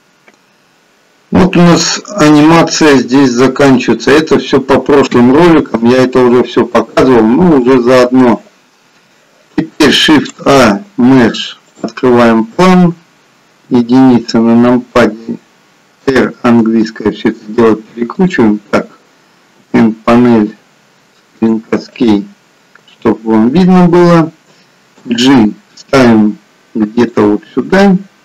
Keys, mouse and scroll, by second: 22.8 n, 25.0 g, 27.7 scroll down 1, 28.0 middle click.